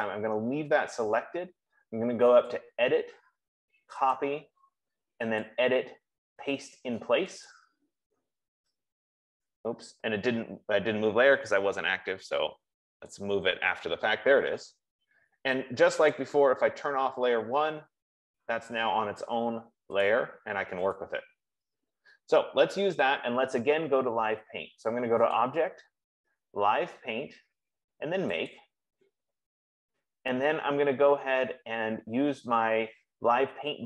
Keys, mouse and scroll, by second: 3.1 click, 4.4 click, 5.8 click, 9.8 F15, 13.2 click, 16.7 click, 20.4 click, 21.4 click, 25.8 click, 29.1 click.